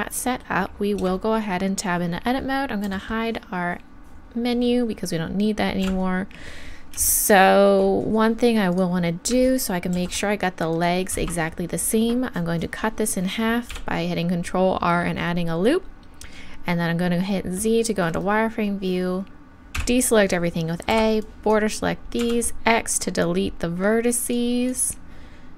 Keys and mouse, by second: 1.0 Tab, 2.8 n, 5.8 KP_1, 8.7-10.6 drag, 9.9 ctrl+r, 13.7 z, 19.8 a, 20.9 b, 22.2 x.